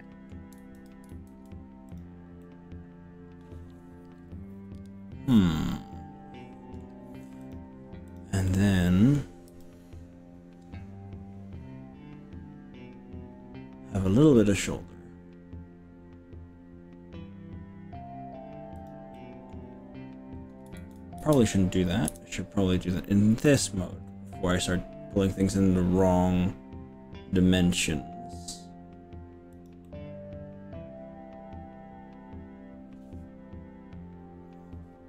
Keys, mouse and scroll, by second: 0.6 ctrl+z, 1.2 ctrl+z, 2.0 click, 2.4 middle click, 4.0-5.5 middle drag, 5.6-6.4 middle drag, 6.4 click, 7.4 click, 8.2 click, 8.6 middle click, 9.6 g, 11.2-11.8 scroll up 4, 17.4 scroll down 1, 18.8 click, 19.2 middle click, 20.8 ctrl+z, 21.2 KP_3, 22.1 KP_1, 23.6 g, 29.6 click, 30.0-35.0 middle drag.